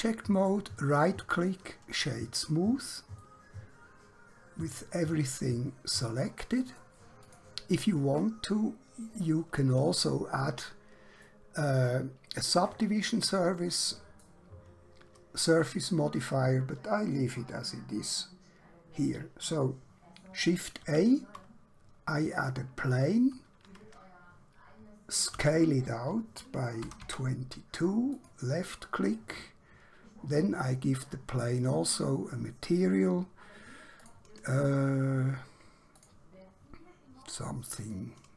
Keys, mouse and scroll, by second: 0.4 right click, 1.3 click, 3.3 middle click, 7.3 click, 11.3 middle click, 20.3 shift+Num_Lock, 20.8 shift+a, 22.4 click, 25.3 s, 26.7-27.1 typing, 28.1 click, 29.2 middle click, 31.5 click, 34.1 click.